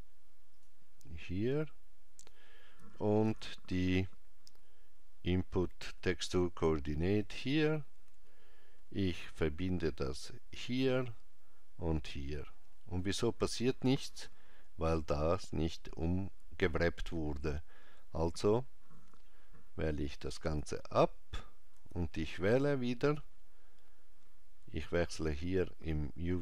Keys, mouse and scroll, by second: 3.3 shift+a, 9.2 click, 12.1 click, 25.5 click.